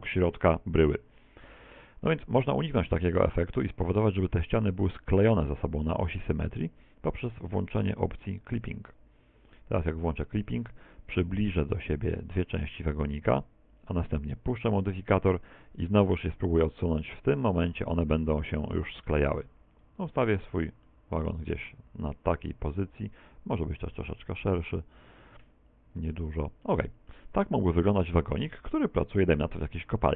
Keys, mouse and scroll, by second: 10.0 click, 11.8 click, 16.2 click, 20.9 middle click, 23.2 click, 26.7 middle click, 27.3 middle click, 28.0 middle click, 30.0 middle click.